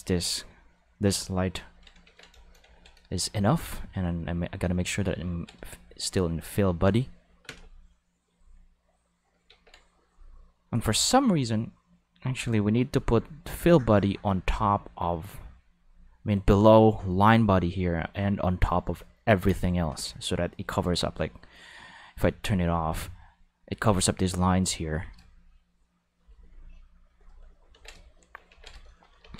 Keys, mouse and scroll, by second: 2.0 ctrl+s, 2.4 shift+middle click, 2.7 ctrl+middle click, 3.1 shift+middle click, 3.4 ctrl+middle click, 3.7-4.3 middle drag, 4.3 click, 7.4 Home, 9.5 ctrl+s, 12.8 click, 13.5 click, 14.0 click, 14.4-17.0 drag, 17.4 click, 22.6 click, 27.1 click, 27.7 ctrl+s, 28.5 ctrl+s, 29.2 ctrl+s.